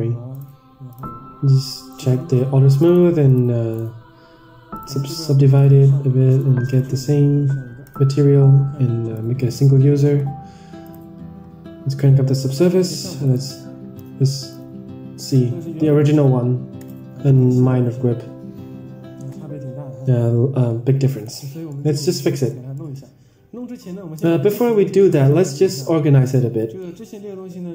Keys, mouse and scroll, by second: 0.8-1.9 drag, 2.6 click, 2.8 click, 3.1 click, 3.6 click, 4.6 click, 5.4 click, 6.3 click, 7.7 drag, 9.0 click, 10.9 click, 13.4 ctrl+shift+click, 16.8 ctrl+shift+click, 21.6 middle drag, 22.0 scroll down 3, 22.2 middle drag, 22.7 middle click, 24.6-25.2 drag, 25.7-26.2 scroll up 4, 26.2 drag, 26.5 middle click, 26.8 scroll down 2.